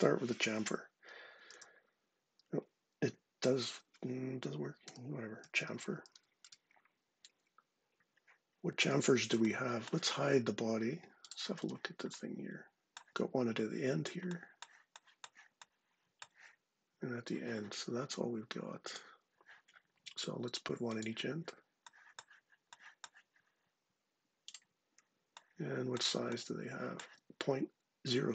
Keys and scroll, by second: 1.3 c, 4.6-5.8 typing, 6.2 Return.